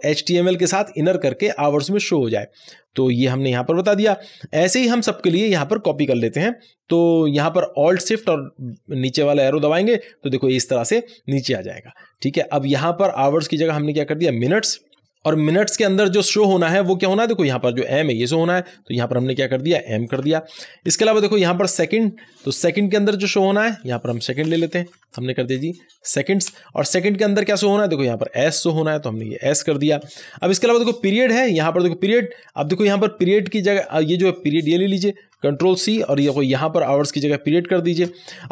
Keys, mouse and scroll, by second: 2.5 click, 4.0 ;, 7.9 ;, 8.2 alt+Down, 11.5-12.1 scroll down 1, 13.1 click, 14.4-15.1 typing, 17.4-20.1 drag, 20.1 m, 20.8 Down, 21.2 Left, 21.7 Down, 22.0 Left, 23.8 Right, 24.4-26.1 typing, 26.4 Return, 28.6 click, 29.8 s, 31.2-35.8 drag, 35.8 ctrl+c, 37.0-38.4 drag, 38.4 ctrl+v.